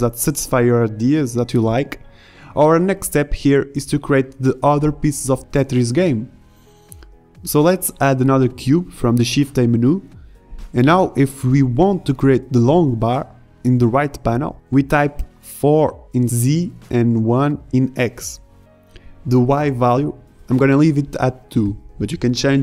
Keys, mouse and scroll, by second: 1.4 shift+a, 4.4-5.2 drag, 5.8 g, 20.5-21.1 drag.